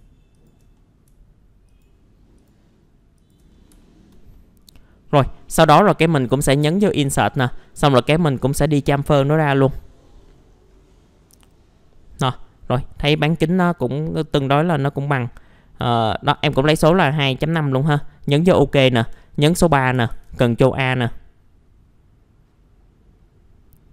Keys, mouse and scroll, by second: 0.3 ctrl+click, 0.7 middle click, 1.7 ctrl+click, 2.4 ctrl+click, 3.2 ctrl+click, 3.5 scroll down 1, 3.8 alt+middle click, 5.1 scroll up 1, 6.7 click, 7.4-7.8 scroll up 1, 7.8 right click, 9.2 click, 10.2 scroll down 1, 10.9 middle click, 11.3-13.0 scroll up 1, 13.0-13.4 scroll down 1, 13.4 middle click, 13.9 scroll up 1, 14.7 scroll up 1, 15.3 middle click, 15.9 alt+middle click, 17.9 click, 18.4 middle click, 19.0-19.7 scroll down 3, 20.3 a, 21.7-23.9 scroll up 1.